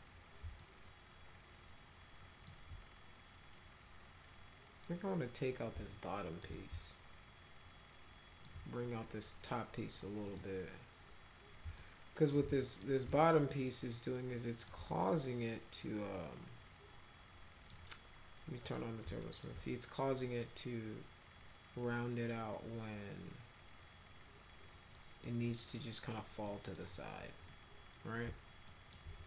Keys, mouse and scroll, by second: 0.6-2.4 alt+middle drag, 5.8 alt+middle click, 6.6-8.4 alt+middle drag, 10.3 click, 11.8-12.3 alt+middle drag, 12.6 middle click, 13.1-14.7 alt+middle drag, 15.0-17.7 middle drag, 18.6 click, 19.2 alt+middle click, 24.9 middle click, 26.5 middle drag, 27.5-27.9 middle drag, 28.7 alt+middle click.